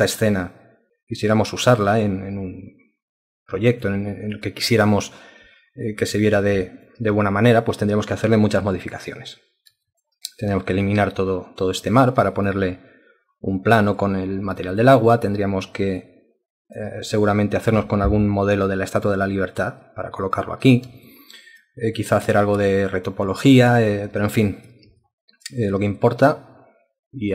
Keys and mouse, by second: 4.1 alt+click, 4.6 alt+click, 6.2 ctrl+alt+click, 6.7 alt+shift+click, 7.1 ctrl+alt+click, 8.8 alt+click, 9.9 alt+click, 12.3 alt+click, 14.7 alt+click, 16.0 ctrl+alt+click, 17.0 alt+click, 21.1 alt+click, 22.0 alt+click, 22.7 alt+click, 23.5 alt+click, 23.9 alt+click, 24.5 ctrl+alt+click, 25.0 alt+shift+click, 26.0 alt+click.